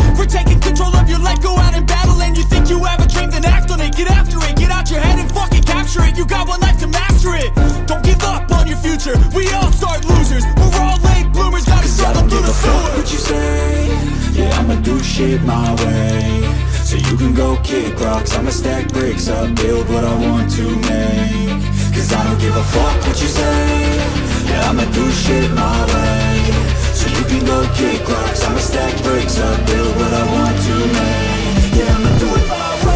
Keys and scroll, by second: 2.3 typing, 3.8-9.0 typing.